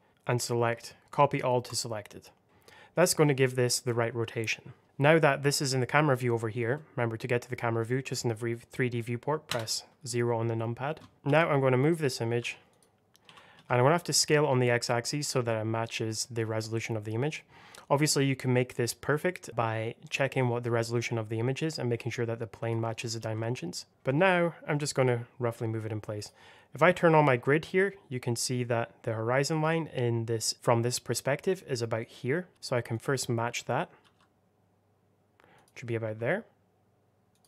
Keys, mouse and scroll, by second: 1.5 right click, 2.4 middle click, 6.6 middle click, 9.4 KP_0, 11.1 click, 12.3 g, 12.6 click, 13.1 s, 13.4 x, 22.5 click, 23.1 g, 24.9 click, 27.1 g, 30.5 click, 32.4 g, 32.8 click, 33.9 g, 35.4 click, 35.9 s, 37.2 click.